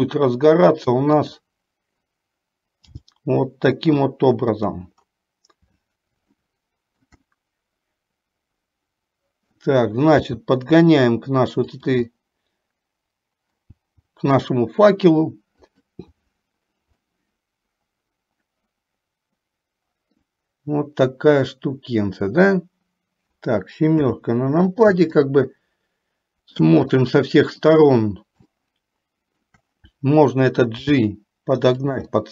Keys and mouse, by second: 0.0 r, 3.1 g, 6.5 shift+middle click, 7.5-9.9 middle drag, 10.5 g, 12.4-13.4 middle drag, 13.4-15.0 drag, 17.2-20.5 middle drag, 24.1 KP_7, 25.4-26.6 shift+middle drag, 27.1 shift+middle click, 28.7 shift+middle click, 31.0 g, 32.2-32.3 middle drag.